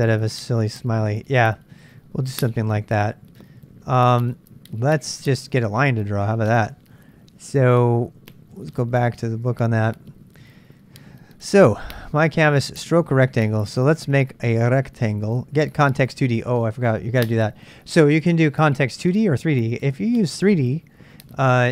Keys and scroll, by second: 2.5 super+Tab, 8.5 super+Tab, 8.7 super+Tab.